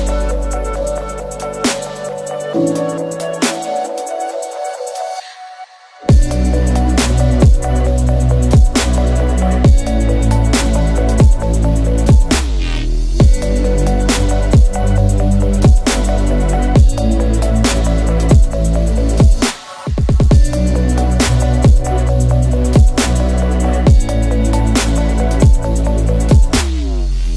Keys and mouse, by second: 11.3 o, 12.8-27.3 middle drag.